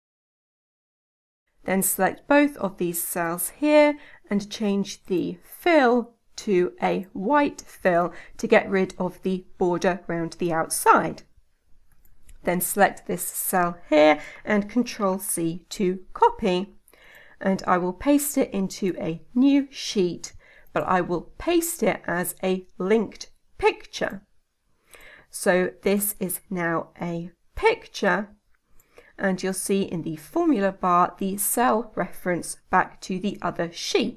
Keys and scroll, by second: 14.8 ctrl+c.